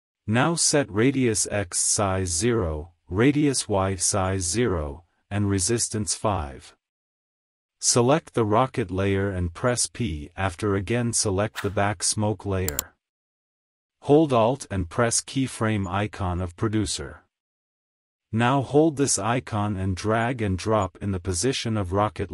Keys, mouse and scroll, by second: 2.0 click, 9.8 click, 10.1 p, 11.1 click, 15.8-19.7 alt+drag, 20.2-22.3 drag.